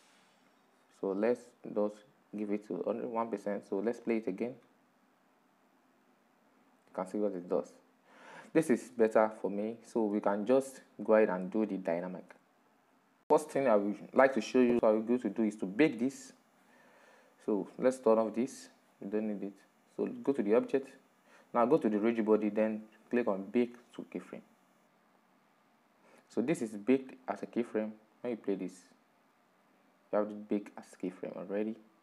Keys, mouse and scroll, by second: 1.3-6.5 drag, 8.7-17.7 middle drag, 17.7-18.3 scroll down 3, 18.3-20.2 shift+middle drag, 20.2 click, 22.1-23.8 drag, 26.0 click, 28.3-29.2 shift+middle drag, 29.2-32.0 drag.